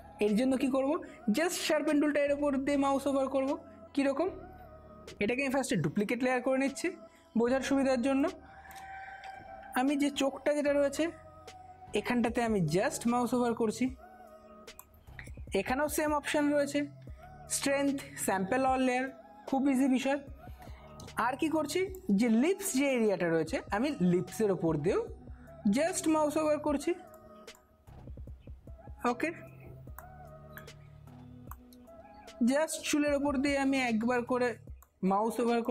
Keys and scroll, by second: 5.9 ctrl+j, 8.0 space, 9.6-10.8 typing, 21.1 space, 30.3 space.